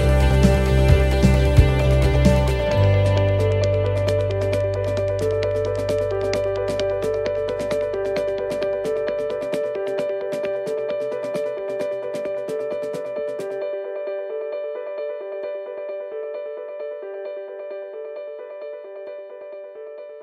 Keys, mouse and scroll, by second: 0.9 shift+middle click, 1.9 middle click, 2.3-2.7 scroll up 2, 2.9 shift+middle click, 3.6 scroll up 1, 4.1 middle click, 5.1 middle click, 7.3 ctrl+r, 11.2 right click, 11.7 shift+right click, 13.0 middle click, 14.2 shift+right click, 15.0 middle click, 16.0 right click, 16.8 click, 19.7 ctrl+z.